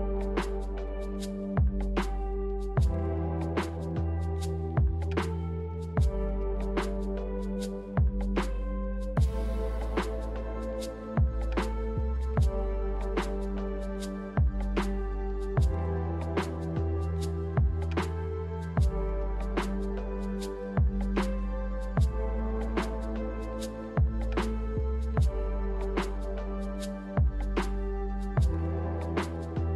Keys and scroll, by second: 0.3-1.3 typing, 19.1 z, 22.0-23.7 typing.